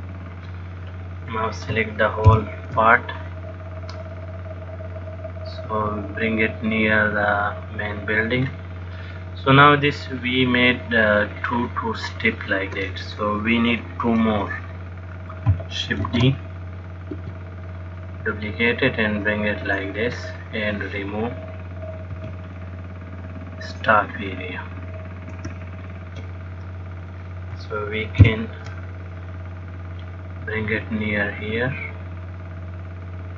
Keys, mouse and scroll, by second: 1.5 click, 2.6 ctrl+l, 4.3 click, 16.7 shift+d, 18.2 click, 20.9 click, 22.4 b, 25.6 x, 27.3 click, 28.6 ctrl+l, 30.2 click.